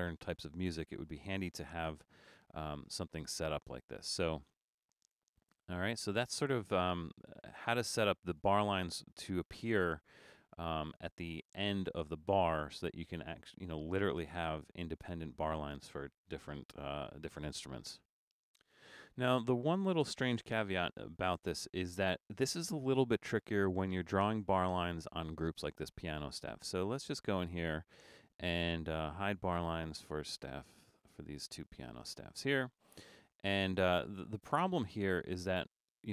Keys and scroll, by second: 1.7 BackSpace, 20.8 super+-.